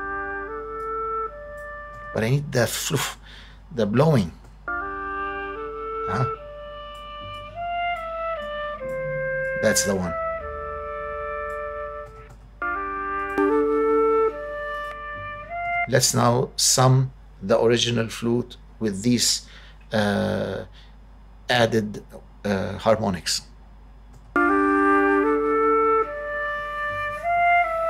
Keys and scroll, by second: 1.9 space, 4.4 space, 12.1 space, 15.7 space, 24.1 space.